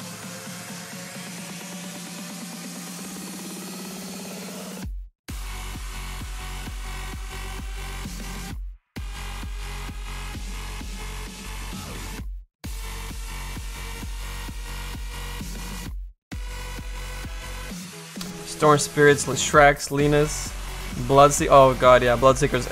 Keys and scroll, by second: 6.7 7.